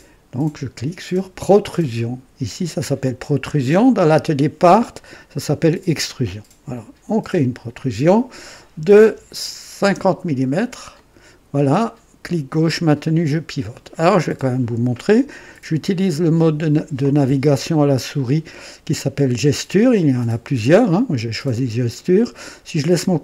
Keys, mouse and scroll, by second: 6.7 click, 9.0 KP_5, 9.8 KP_0, 10.9 click, 12.6-14.0 drag, 12.6-13.0 typing, 15.8 typing, 19.8 click, 21.9 click.